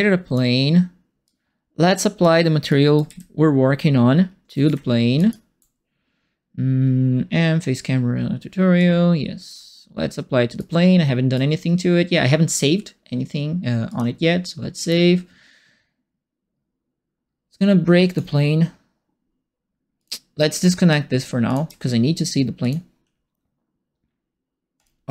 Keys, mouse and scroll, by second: 1.2 click, 2.2 scroll up 2, 2.6 right click, 3.0 f, 5.1 ctrl+space, 8.7 click, 10.5 right click, 13.8 click, 14.8 click, 19.9 click, 21.4 alt+click, 22.6 click, 24.7 click.